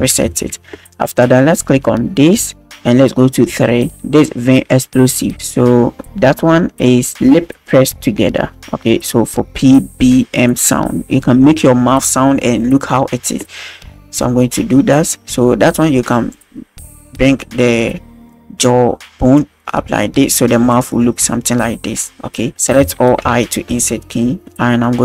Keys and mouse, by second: 0.0 alt+r, 0.4 alt+s, 2.3 click, 15.0 click, 16.3 click, 21.2 shift+drag, 22.4 click, 22.5 a, 23.3 i.